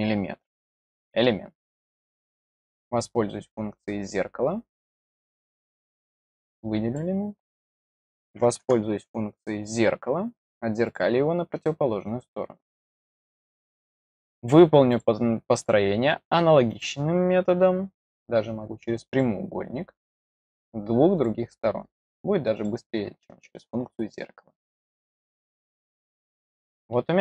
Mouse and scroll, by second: 2.3 click, 6.2-6.9 drag, 9.6 click, 10.8 click, 14.8 click, 15.5 click, 16.6 click, 17.9 click, 19.0 click, 21.1 click, 22.5 click, 26.1-27.1 middle drag.